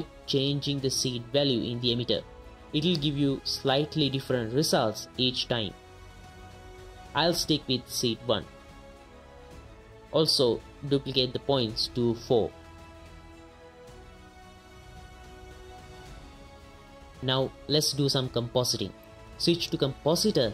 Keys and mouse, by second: 2.5 click, 5.1 space, 5.4 click, 5.8 space, 8.9 click, 9.2 click, 9.5 space, 10.1 click, 10.9 click, 14.5 space, 15.7 z, 18.1 right click, 19.3 right click.